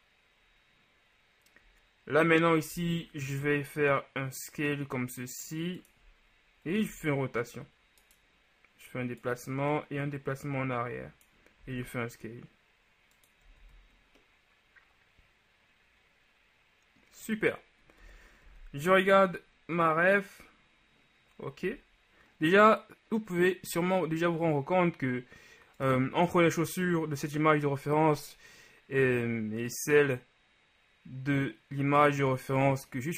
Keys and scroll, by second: 2.8 s, 3.3 shift+s, 6.9 r, 11.7 s, 13.7 z, 18.1 KP_1, 18.5 z, 21.7 z.